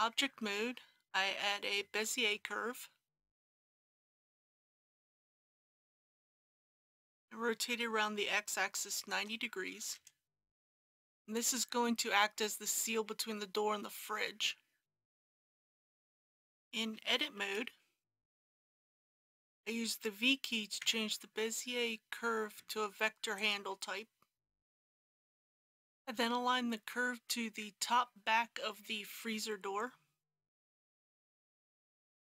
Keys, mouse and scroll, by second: 5.7 click, 7.7 r, 8.2 x, 8.9 KP_9, 9.1 KP_0, 15.9 click, 16.1 Tab, 17.4 KP_1, 18.9 v, 23.3 click, 25.2 KP_1, 30.3 g, 30.9 z.